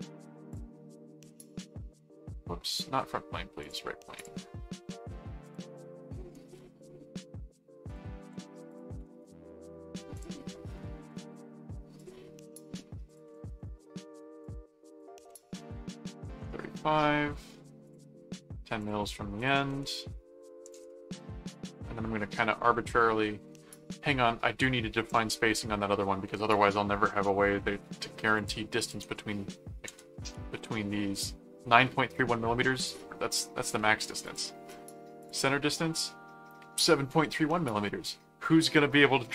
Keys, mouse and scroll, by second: 0.5 click, 1.4 click, 2.7 click, 3.6 click, 4.8 middle click, 5.4 click, 6.3 right click, 7.9 click, 8.7 click, 9.2 right click, 10.1 click, 11.1 right click, 12.0 click, 13.0 click, 13.6 right click, 14.4 click, 17.8 click, 18.8 click, 25.0 ctrl+click, 25.3 ctrl+Tab, 28.3 click, 29.8 ,, 30.2 m, 34.3 click, 35.2 click.